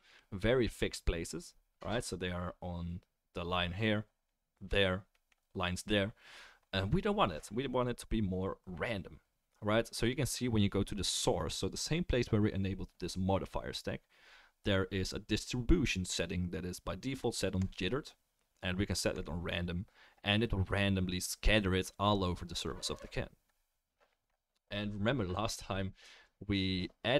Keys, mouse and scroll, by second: 14.4-26.2 drag, 14.4-26.2 right drag.